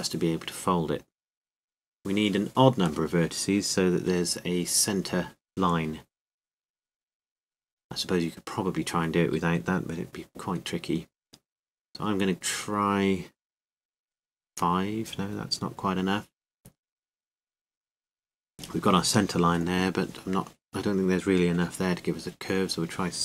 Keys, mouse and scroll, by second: 1.0 w, 3.7 click, 15.1 click.